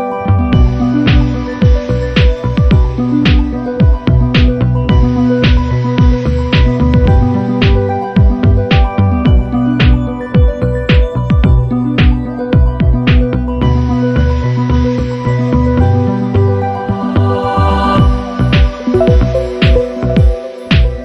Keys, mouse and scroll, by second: 1.6 ctrl+v, 3.0 shift+click, 4.3 click, 5.7 click, 6.2 click, 7.5-9.1 ctrl+shift+drag, 10.1 ctrl+d, 11.2-13.3 ctrl+shift+drag, 14.5 shift+click, 15.1 shift+click, 16.8 click, 18.9 ctrl+KP_Add, 20.5 click.